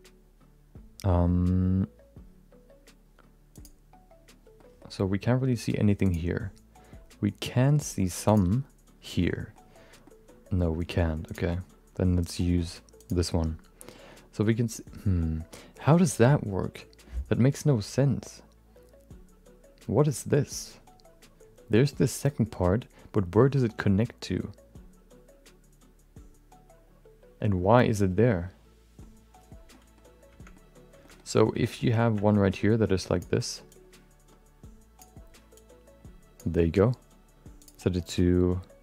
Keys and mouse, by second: 4.6 middle click, 5.3 middle click, 9.4 middle click, 10.1 middle click, 13.9 middle click, 14.6 middle click, 28.4 middle click, 29.7 middle click, 30.5 middle click, 31.0 shift+middle click, 31.6 shift+middle click, 31.7 middle click, 32.3 middle click, 33.0 click, 33.7-35.3 drag, 35.5-36.6 drag, 37.6-38.8 drag.